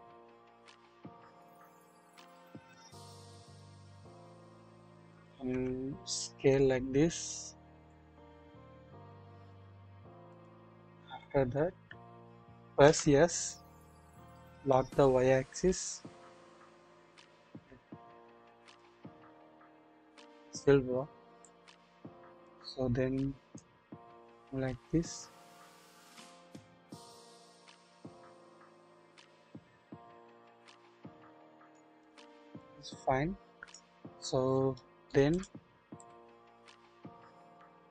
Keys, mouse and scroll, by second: 1.6-3.3 drag, 1.6-2.2 scroll down 1, 3.4-3.8 scroll up 1, 4.5-4.9 shift+middle drag, 5.5 typing, 9.1 typing, 10.6-11.0 scroll down 1, 11.0 typing, 12.8 typing, 14.3 typing, 21.4-22.5 drag, 22.7-23.5 scroll up 1, 23.5 typing, 23.6-31.8 drag, 32.6-33.7 drag, 34.0-34.5 scroll up 1, 34.7-35.1 shift+middle drag, 35.3 shift+click, 36.0 click.